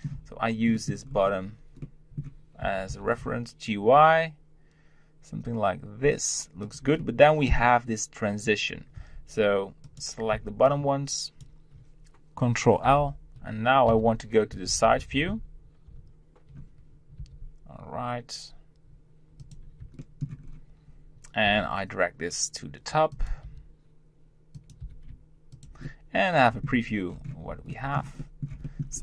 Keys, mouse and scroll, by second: 1.0 scroll up 1, 1.8 middle click, 2.6 g, 7.0-9.0 middle drag, 9.0 Tab, 9.8 click, 10.3 b, 12.8 ctrl+l, 17.2 r, 20.0 shift+middle click, 20.4-21.5 scroll up 1, 21.5 g, 25.8 middle click, 26.7 Tab, 27.1-28.1 scroll down 2, 28.1-28.9 shift+middle drag, 28.9 scroll up 3.